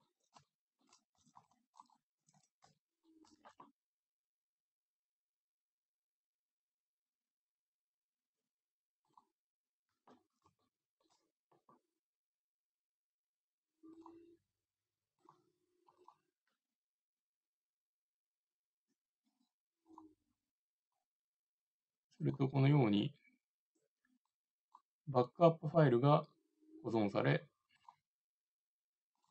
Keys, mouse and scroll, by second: 1.2 a, 1.4 c, 1.8-3.6 drag, 2.4 a, 9.1-11.0 drag, 10.7 right click.